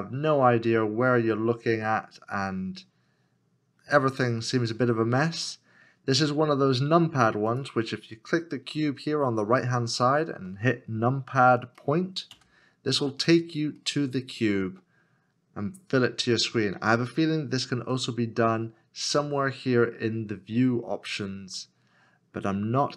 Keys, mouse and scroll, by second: 2.0 middle click, 12.3 KP_Decimal, 13.8 middle click, 15.0 scroll down 1.